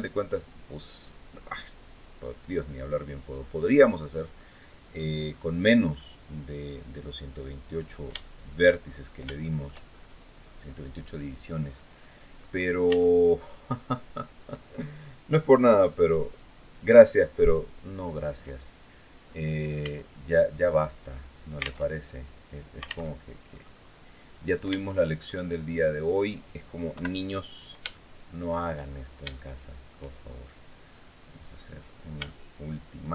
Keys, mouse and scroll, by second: 0.0-4.1 drag, 4.1 scroll up 2, 4.3-4.6 scroll down 2, 5.5-5.9 scroll up 2, 6.4 click, 7.4-7.8 scroll up 2, 8.0 shift+middle click, 9.1 shift+middle click, 9.6-10.0 shift+scroll up 3, 10.1-10.4 scroll down 2, 10.8-11.1 scroll down 2, 11.4-11.7 scroll up 2, 11.7 scroll down 2, 12.2-12.6 scroll up 2, 12.6 Tab, 13.0-13.5 scroll up 2, 19.0 scroll up 2, 19.5 a, 20.0-20.5 scroll down 2, 20.7 scroll down 2, 21.5 alt+Tab, 22.8 alt+Tab, 23.2-23.8 scroll up 2, 24.6 shift+middle click, 25.3-25.6 shift+scroll up 3, 25.8 scroll down 2, 26.6 KP_7, 27.6 shift+middle click, 28.6 shift+scroll up 1, 29.1 shift+middle click, 30.9 click, 31.5-31.8 scroll up 1, 32.0-33.0 shift+middle drag.